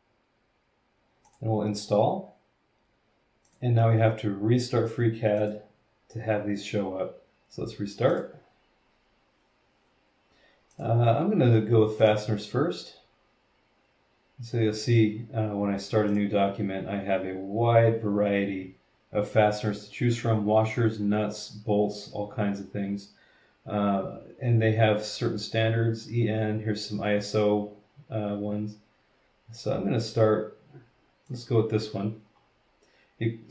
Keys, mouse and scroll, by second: 1.2 click, 3.4 click, 5.4 click, 8.1 click, 10.7 click, 12.0 click, 16.1 click, 31.3 click, 32.3-32.7 scroll down 1, 33.0 scroll down 1.